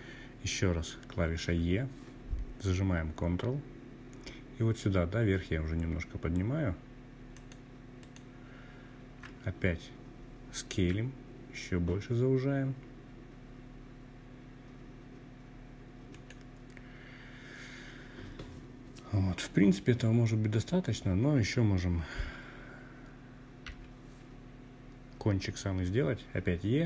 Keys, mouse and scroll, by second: 5.3 ctrl+right click, 8.7 s, 14.1 click, 21.6 e.